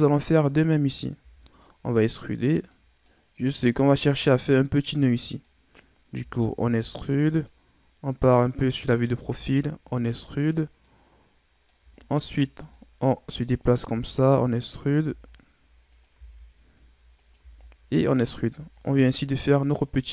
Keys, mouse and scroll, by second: 1.1 e, 2.6 middle click, 3.2-3.7 scroll up 2, 3.7-6.1 middle drag, 6.1 e, 7.4-9.1 middle drag, 9.1 e, 10.8-11.9 middle drag, 11.9-12.4 scroll up 10, 12.7-13.8 middle drag, 13.8 e, 15.0 e, 17.3 e, 18.7 scroll down 1, 19.0-20.1 middle drag.